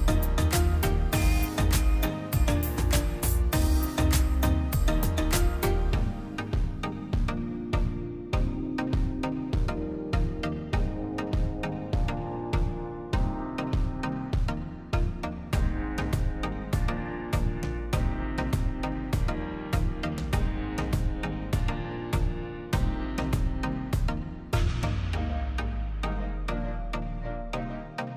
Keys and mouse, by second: 2.2-8.5 drag, 8.5 space, 9.3 click, 12.3 z, 13.2 click, 16.0 click, 20.0 z, 20.8-22.3 drag.